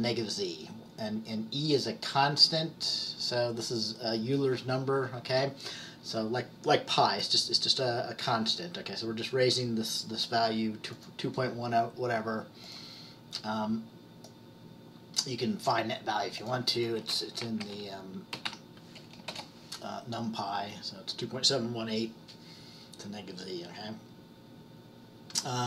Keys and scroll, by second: 17.5-19.0 typing.